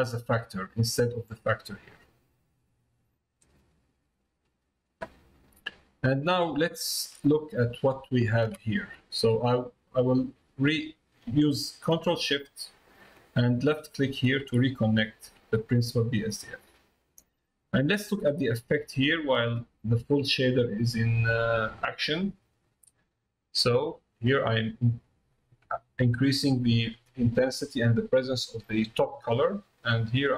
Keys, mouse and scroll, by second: 1.9-3.4 drag, 3.9 middle click, 5.8 middle click, 6.6 middle click, 13.8 ctrl+shift+click, 16.8 middle click, 18.4 middle click, 19.5 middle click, 20.3 middle click, 23.0-24.3 drag, 30.2-30.3 drag.